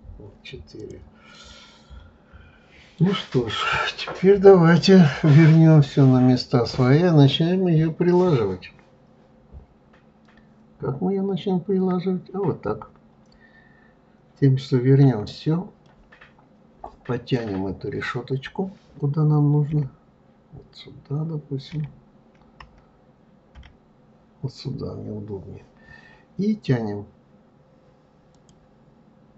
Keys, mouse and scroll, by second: 0.8 click, 1.4-4.4 middle drag, 15.0 KP_Divide, 15.8-18.8 middle drag, 19.6 KP_1, 24.6-25.0 scroll up 2, 28.3 click.